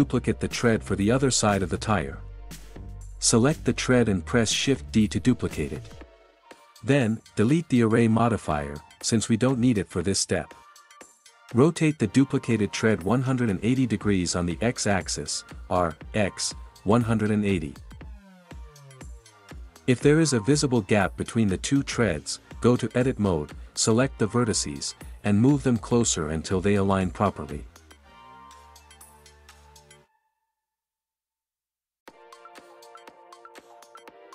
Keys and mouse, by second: 4.1 shift+d, 5.0 click, 7.0 click, 15.7-17.4 typing, 18.1 KP_Enter, 19.8 click, 25.5 click, 27.2 Tab.